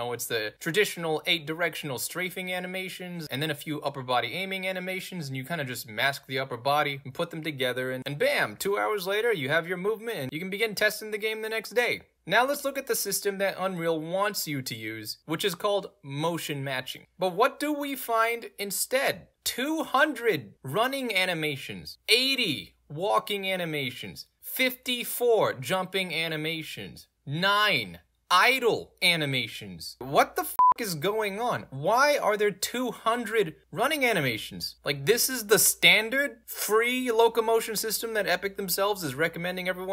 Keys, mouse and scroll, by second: 15.0 a, 15.5 d, 16.8 space, 18.9 click, 19.0 click, 20.3 middle click, 20.3-20.7 scroll up 3, 20.7-21.2 scroll down 2, 21.7 scroll down 2, 22.0 click, 22.1 click, 24.3 click, 27.1 click, 27.3 click, 30.5 click, 30.6 click, 31.2 middle click, 31.2-31.6 scroll down 2, 31.8 middle click, 31.8-32.8 scroll down 3, 32.1 middle click, 34.0 click, 34.1 click, 35.6 middle click, 35.6-36.2 scroll down 3, 35.9 middle click, 36.4 middle click, 36.4-36.8 scroll down 2, 37.6 alt+middle click.